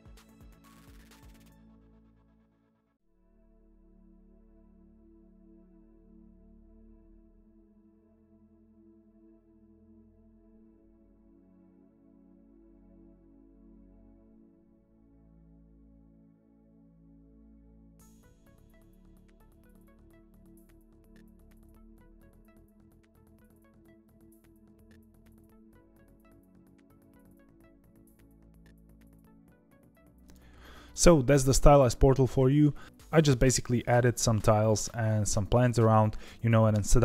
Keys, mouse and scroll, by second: 0.1 click, 1.4 scroll down 2, 1.5 g, 3.1 r, 3.4 ., 3.7 r, 5.2 r, 6.6 click, 6.9 KP_0, 9.4 click, 11.5 ctrl+s, 11.8-12.3 scroll up 1, 12.3 click, 12.6 click, 13.3 ctrl+s, 13.5-14.2 scroll down 2, 14.2 scroll up 1, 14.4 click, 14.6 click, 14.7 click, 14.9 click, 15.1 click, 15.2 click, 15.4 click, 15.5 click, 15.6 click, 15.9 scroll down 10, 16.2 click, 16.5 click, 18.3 ctrl+s, 18.5 scroll down 2, 19.1 scroll up 6, 19.3 click, 19.6 click, 19.9 drag, 21.0 scroll down 3, 21.3 click, 24.7 ctrl+s, 24.8 scroll up 1, 25.3 click, 25.5-26.4 scroll down 16, 25.9 click, 26.4 click, 26.8-28.1 drag, 28.1 ctrl+s, 28.2 click, 28.5 click, 28.9 click, 29.1 KP_0, 29.6 click.